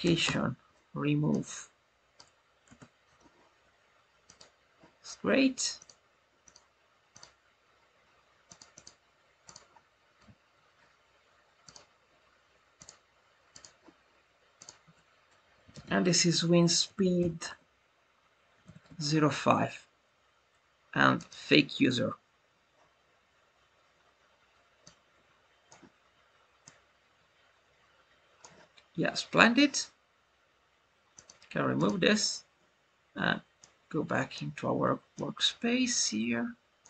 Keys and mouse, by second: 1.2-2.1 drag, 4.2 click, 8.4 click, 8.8-9.4 drag, 11.6 click, 12.8-13.5 drag, 14.7-19.5 drag, 21.2-25.6 drag, 26.6-28.3 drag, 31.1 click, 31.7 click, 33.5-34.3 drag, 35.1-36.8 drag.